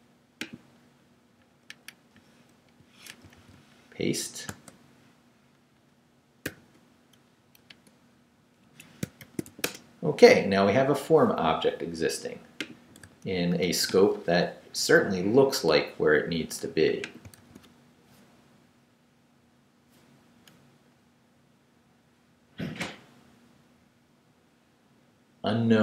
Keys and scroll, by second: 2.6 super+i, 3.1 BackSpace, 3.4 super+v, 4.5 super+space, 6.4 shift+5, 8.6 shift+Escape, 9.0 shift+Escape, 9.2 shift+;, 9.5 shift+w, 9.6 Return, 17.4 super+r.